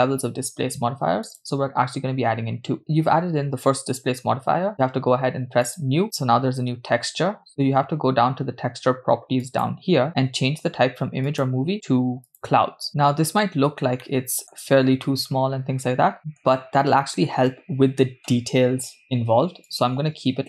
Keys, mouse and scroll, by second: 5.7 click, 9.5 click, 11.3-12.7 drag, 12.9-13.5 middle drag, 14.0 scroll up 3, 14.1-14.6 middle drag, 14.6 scroll down 1, 15.1-16.4 middle drag, 16.5 scroll down 1, 19.7-20.4 drag.